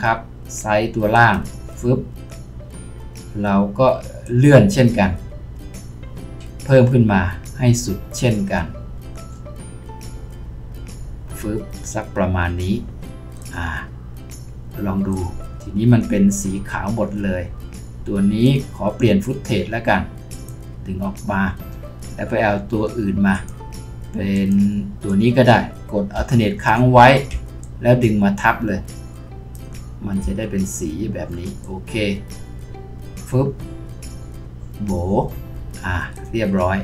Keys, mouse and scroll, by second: 27.6 alt+click.